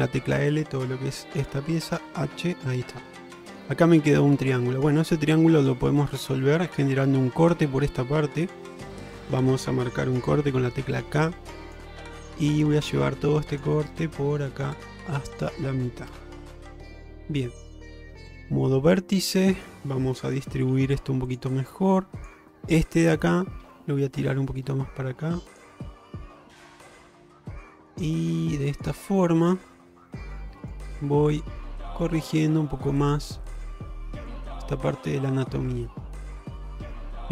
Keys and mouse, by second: 0.0 h, 0.0 l, 2.0 h, 2.6-3.6 middle drag, 4.6 middle click, 8.5 click, 8.9 middle click, 10.5 k, 14.0-16.4 middle drag, 16.5-17.5 middle drag, 18.4 1, 18.6 middle click, 19.6 click, 20.7 g, 22.3 click, 22.6 middle click, 26.0-27.3 middle drag, 27.9 click, 28.1 g, 29.1 middle click, 30.7 click, 31.0 g, 31.8 middle click, 32.4 click, 32.7 g, 33.7 g, 34.8 middle click, 35.3 middle click, 35.8 middle click.